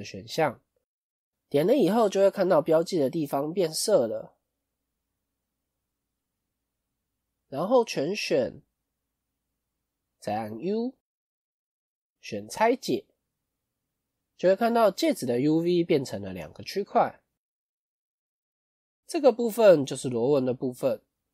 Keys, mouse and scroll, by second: 1.8-2.1 scroll up 3, 2.5 click, 2.8-3.2 scroll up 1, 3.2 middle click, 5.7 KP_1, 6.3-6.9 scroll down 5, 6.9-7.4 scroll down 2, 7.4 a, 15.9 click, 17.8 shift+middle click, 20.9 click.